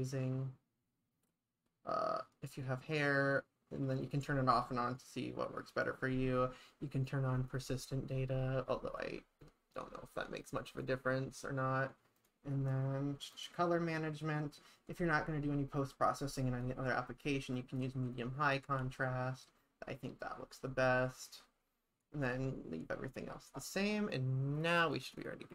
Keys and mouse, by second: 10.7 click, 12.2 click, 16.4-17.8 drag, 18.8 ctrl+s, 24.8 click.